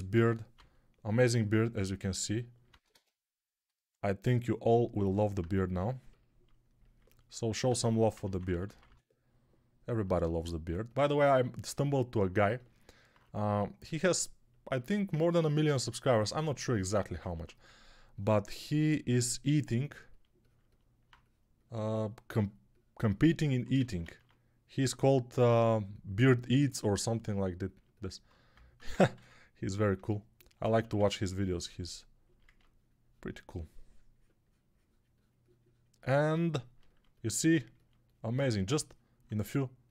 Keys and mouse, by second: 0.0 g, 0.4-1.2 ], 2.6 ctrl+z, 2.9 ctrl+z, 4.0-13.0 right drag, 4.8-13.0 alt+drag, 4.8-13.0 alt+middle drag, 8.0-8.7 typing, 17.2 1, 23.7 ctrl+z, 24.1 ctrl+z, 24.7 g, 29.5 ctrl+r, 30.7 1.